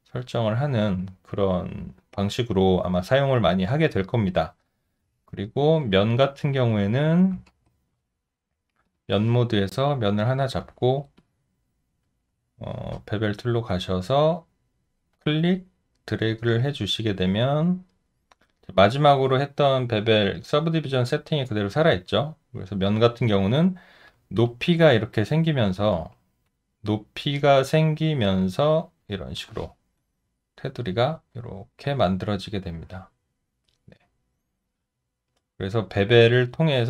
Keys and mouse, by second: 5.4 alt+right click, 5.8 alt+middle click, 6.7 alt+click, 7.5 ctrl+z, 10.8 alt+middle click, 11.2 alt+click, 12.8 space, 24.4 alt+click, 25.9 ctrl+z, 30.0 alt+click.